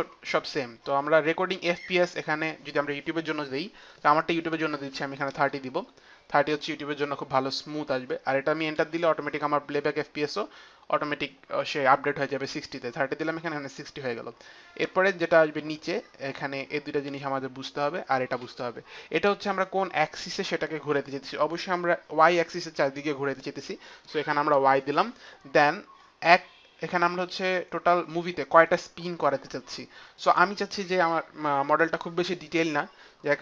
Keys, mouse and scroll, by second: 1.9 click, 5.1 click, 5.1 KP_3, 5.2 KP_0, 6.2 KP_0, 6.2 KP_3, 8.7 Return, 8.7 KP_0, 8.7 KP_3, 30.1 click.